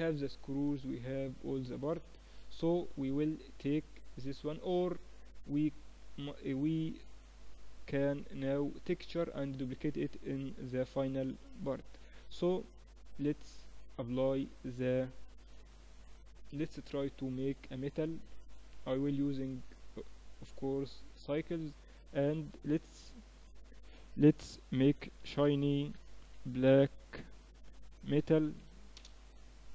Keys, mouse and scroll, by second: 1.0-2.0 middle drag, 2.0 KP_3, 6.6-9.0 middle drag, 10.6 ctrl+s, 12.7-14.6 right drag, 15.9-23.2 drag.